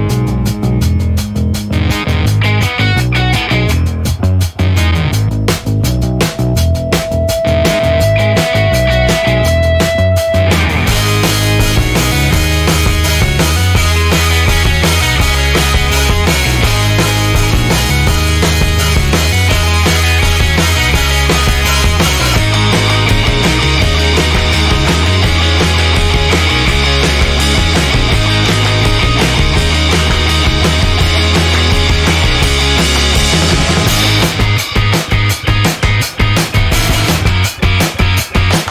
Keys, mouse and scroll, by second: 0.2 1, 0.7 click, 1.4 click, 2.3 click, 3.8 click, 6.8 scroll up 2, 7.9-8.5 scroll down 2, 9.6 click, 10.8 click, 12.2 click, 13.2 click, 14.3 click, 15.2 click, 16.2-17.0 scroll down 3, 17.5-18.6 scroll down 6, 19.4 scroll down 2, 20.5-21.2 scroll down 4, 22.0 scroll down 2, 23.6 click, 24.3 click, 25.6 click, 26.0 click, 26.9 BackSpace, 27.7 1, 28.1 0, 31.6-32.9 typing, 34.0 /, 35.1-36.0 typing, 37.0 click.